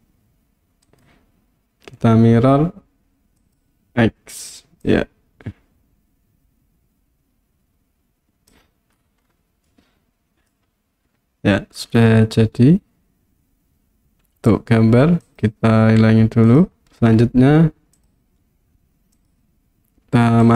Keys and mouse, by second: 1.1-3.6 right drag, 4.8-8.5 drag, 9.8-10.5 middle drag, 15.4 click, 16.5 click.